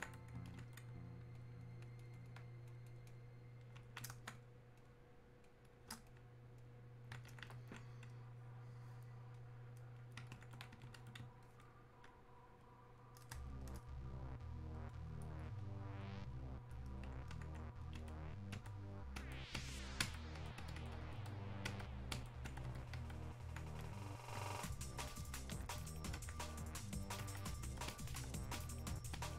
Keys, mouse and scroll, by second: 1.4 ctrl+click, 7.6-11.5 ctrl+drag, 12.6-19.7 drag, 23.9-25.2 drag, 25.2-28.5 alt+drag.